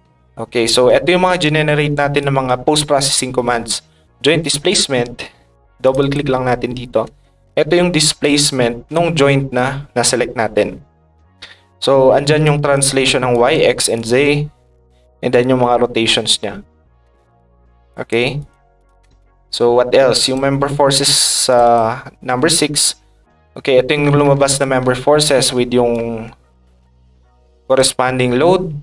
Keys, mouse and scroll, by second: 2.2 ctrl+click, 4.4 click, 5.8 click, 6.0 click, 8.2 ctrl+click, 12.4 ctrl+shift+click, 13.3 click, 13.9 click, 17.9 ctrl+shift+click, 18.4 ctrl+shift+click, 18.7 ctrl+shift+click, 20.2 click, 21.4 click, 21.6 click, 22.5 middle click, 23.1 middle click, 24.6 click, 25.9 click, 26.3-27.7 ctrl+drag.